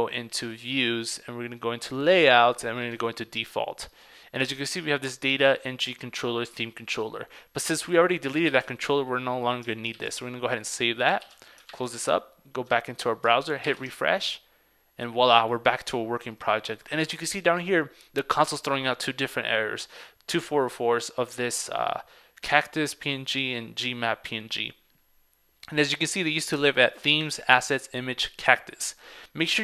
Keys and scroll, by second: 8.6 super+x, 10.0 super+s, 11.2 super+s, 11.3 super+w, 11.9 super+Tab.